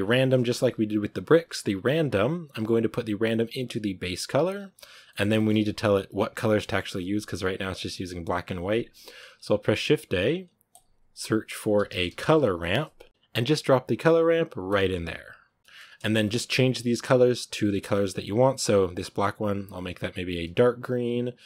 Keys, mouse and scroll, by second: 5.0-13.2 shift+middle drag, 15.6-19.7 drag.